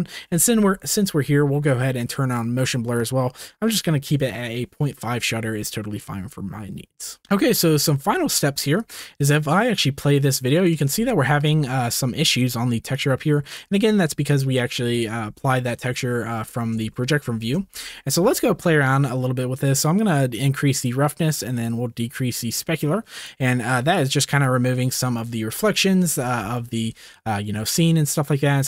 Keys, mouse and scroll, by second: 2.3 click, 7.2 ctrl+s, 8.8-10.8 drag, 12.9-13.5 drag, 17.7-20.0 shift+middle drag, 20.0 click, 20.8 middle click, 21.5 click, 21.6-22.3 middle drag, 22.3 click, 23.2 middle click, 23.7 click, 24.4-26.2 middle drag, 26.4 shift+middle click, 26.7 shift+middle click.